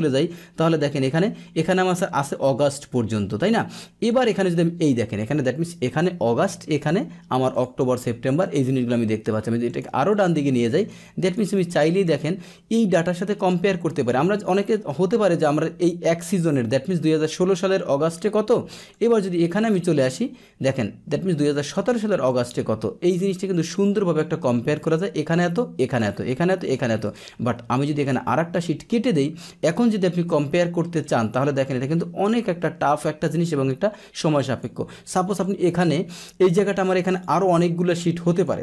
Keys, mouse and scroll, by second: 4.0 click, 5.8 click, 6.7 click, 7.5 click, 7.9 click, 8.4 click, 9.6 click, 10.0 click, 10.7 click, 11.2 click, 11.5 click, 12.0 click, 13.9 click, 14.5 click, 18.7 click, 18.9 click, 19.5 click, 22.2 click, 23.7 click, 24.7 click, 25.4 click, 25.9 click, 26.6 click, 27.0 click, 28.0 click, 29.3 click, 31.0-34.6 drag, 35.4-36.8 drag, 37.1 right click, 38.3 click.